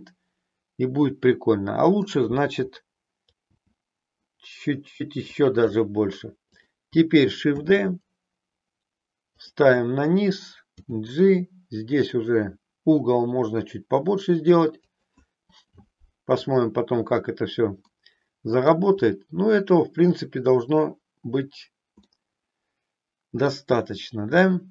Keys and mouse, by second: 3.5 g, 5.5 click, 7.6 shift+d, 10.3 click, 10.8 g, 14.9 click, 17.9 middle click, 22.1-23.7 middle drag, 24.6-24.7 middle drag.